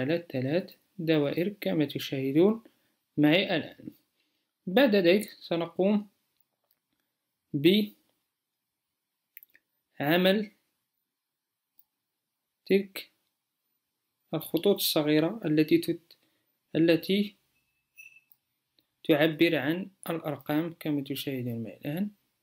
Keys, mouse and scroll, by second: 17.6 m.